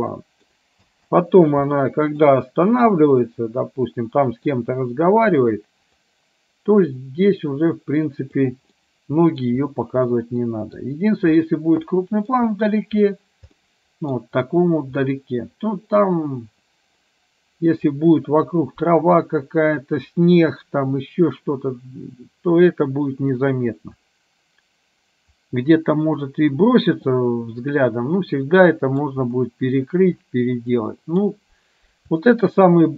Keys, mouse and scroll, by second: 0.1-0.6 middle drag, 0.9 space, 1.7-2.2 middle drag, 3.0-4.6 middle drag, 6.1-8.5 drag, 8.9-9.5 middle drag, 10.1-10.9 middle drag, 12.0 middle click, 13.7-14.2 middle drag, 15.1-17.9 middle drag, 23.5-29.1 middle drag, 30.9 middle click, 32.2-32.9 shift+middle drag.